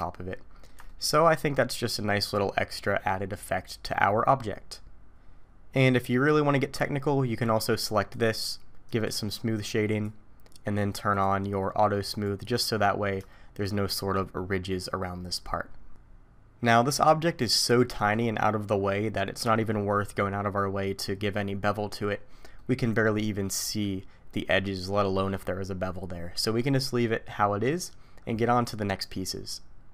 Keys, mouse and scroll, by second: 0.3 alt+a, 0.3 middle click, 0.9 shift+middle click, 1.3-2.5 scroll up 3, 2.5-3.3 scroll up 1, 8.1 click, 8.8 right click, 11.1 click, 12.1 click, 12.6-13.2 scroll up 2, 13.3 shift+middle click, 17.8-20.8 scroll up 1, 21.8-22.7 scroll down 8, 22.6 middle click.